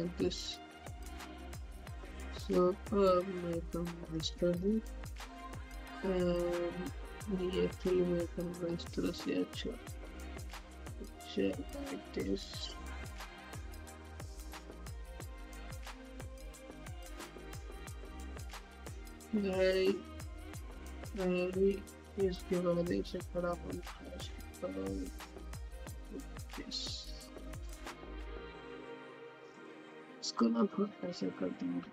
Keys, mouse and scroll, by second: 0.0 scroll up 1, 0.6-4.8 drag, 4.8-5.6 typing, 6.5-18.6 drag, 18.6-20.9 typing, 22.0 typing, 23.1-24.6 typing, 25.8-29.7 typing, 30.5-31.9 drag.